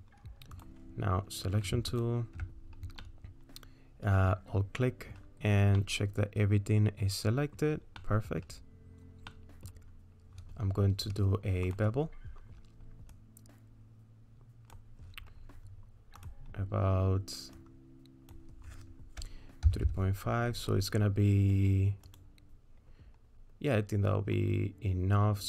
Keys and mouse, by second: 0.6 click, 2.0 alt+click, 3.0-5.1 middle drag, 5.8-7.6 middle drag, 8.0 middle click, 9.3 middle click, 11.7 click, 13.1-14.8 drag, 16.3-22.2 drag.